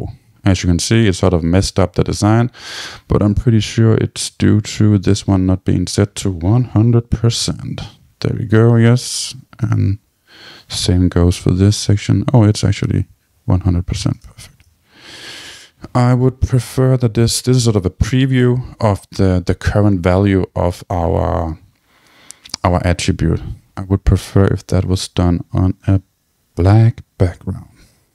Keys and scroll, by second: 7.3 Tab.